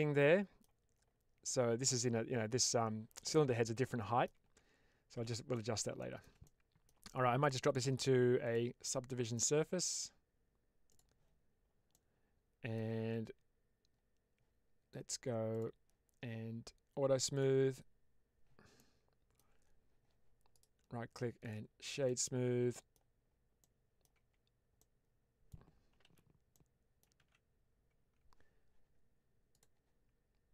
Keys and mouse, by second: 3.8 middle click, 4.3 Tab, 5.4 middle drag, 5.9 shift+middle click, 6.3 middle click, 8.4 click, 10.9-11.8 drag, 11.8-12.6 middle drag, 15.4 click, 17.2 click, 18.6-19.2 middle drag, 20.4-21.4 right drag, 21.9-22.8 middle drag, 23.5-23.9 middle drag, 24.1 Tab, 24.7 middle click, 25.9 alt+z, 26.4 middle click, 27.1 alt+z, 29.4 click.